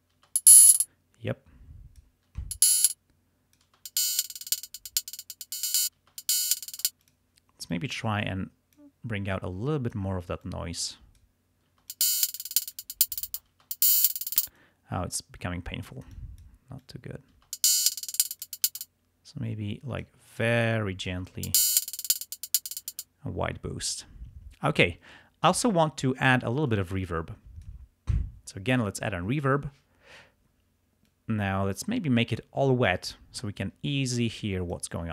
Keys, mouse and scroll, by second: 0.2 space, 1.3 click, 2.4 space, 2.8 click, 3.8 click, 3.8 space, 4.0 space, 4.6-5.8 drag, 5.8 space, 6.8 space, 7.1 click, 7.8-9.0 drag, 9.4 click, 10.5 click, 11.8 space, 11.9-13.4 scroll up 2, 13.4 scroll up 1, 13.4 space, 14.4 space, 14.6-15.0 scroll up 1, 16.9 click, 17.5 space, 17.7-18.7 scroll up 1, 18.7 space, 18.9 space, 20.5 click, 21.4 space, 22.9 space, 26.8-27.9 drag, 31.1-33.1 drag, 34.4 click.